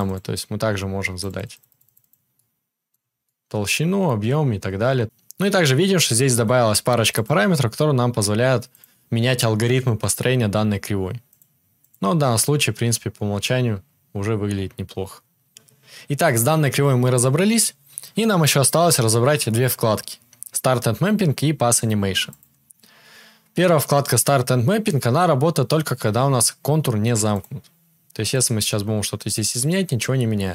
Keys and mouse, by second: 7.1 click, 7.1 middle click, 8.6 click, 8.6 middle click, 11.2 click, 11.2 middle click, 11.7 click, 11.7 middle click, 15.5-30.5 drag, 15.5-30.5 middle drag.